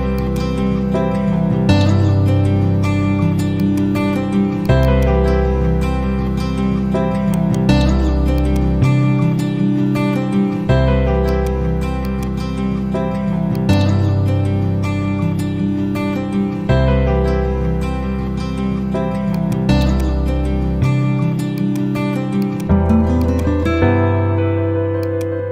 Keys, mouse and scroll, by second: 0.1-2.9 drag, 7.2 right click, 8.3 click, 9.3 ctrl+q, 11.2-12.6 drag, 19.2 click, 22.3 shift+click, 24.9 click.